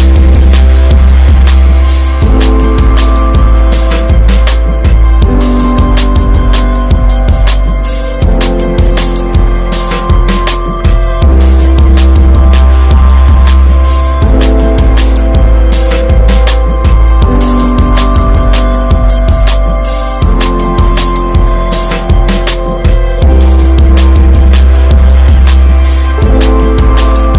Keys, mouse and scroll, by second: 0.2 s, 2.1-2.5 drag, 2.5-3.4 shift+middle drag, 3.4 drag, 5.4 middle click, 5.9 scroll up 1, 6.3 Tab, 6.7 Tab, 6.9 click, 7.2 ctrl+a, 7.8 ctrl+a, 8.9-9.4 shift+middle drag, 9.4 Tab, 10.0 3, 10.2 click, 10.6 alt+middle click, 11.1 s, 12.5 middle click, 12.8 click, 13.3 alt+middle click, 13.7 shift+middle click, 14.6 click, 14.9 shift+middle click, 15.6 click, 16.6-18.4 shift+middle drag, 18.6 shift+d, 19.8 s, 21.1 shift+middle click, 21.4 e, 22.8 s, 25.7 s.